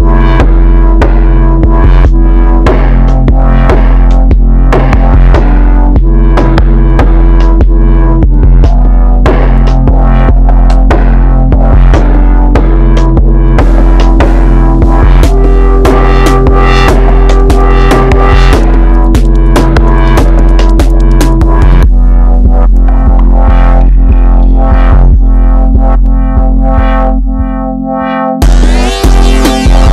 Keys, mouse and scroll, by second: 0.4 scroll up 1, 0.6 KP_1, 1.2 Tab, 3.1-3.6 scroll down 1, 3.6-7.1 middle drag, 7.1-8.3 scroll up 1, 8.3-11.6 middle drag, 11.6 click, 13.1 shift+click, 14.7 shift+click, 16.5 click, 17.8-21.0 middle drag, 21.0 click, 22.7 click, 24.5-26.5 middle drag, 26.5 click, 27.7 middle click, 28.3 KP_3, 28.9 KP_2.